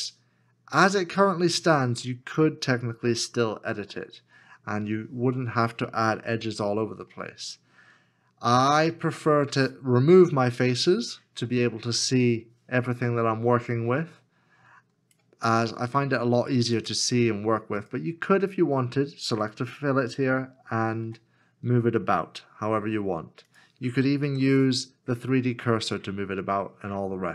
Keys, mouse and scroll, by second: 6.3 middle click, 21.0 g, 24.2 g, 24.3 ctrl+z.